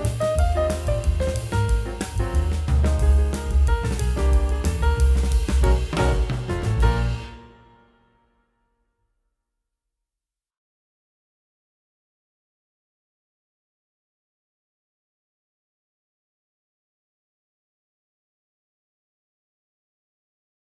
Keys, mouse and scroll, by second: 11.8 F10, 13.3 double click.